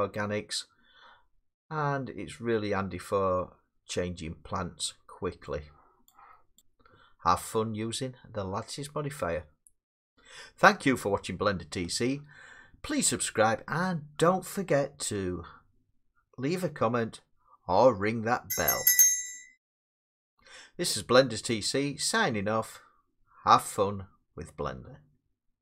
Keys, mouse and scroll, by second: 5.4 middle click, 6.6 click.